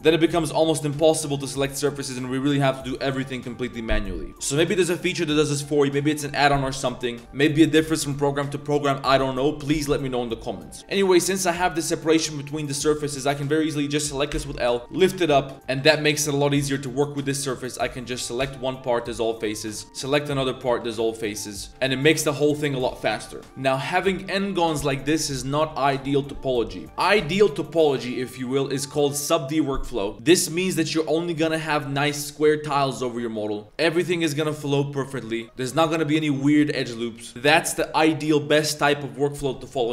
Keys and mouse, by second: 0.3 l, 0.4 l, 1.3 1, 1.7 alt+click, 4.2 middle click, 4.2 click, 4.3 ctrl+z, 4.3 a, 4.3 l, 4.7 click, 5.3-5.6 drag, 5.8 click, 10.8 a, 11.8 click, 14.3-16.4 typing, 18.4 x, 19.6 a, 19.7 a, 19.8 b, 20.6 x, 21.8 ctrl+z, 21.9 ctrl+z, 22.1 ctrl+z, 23.3 click, 23.8 click, 25.2 click.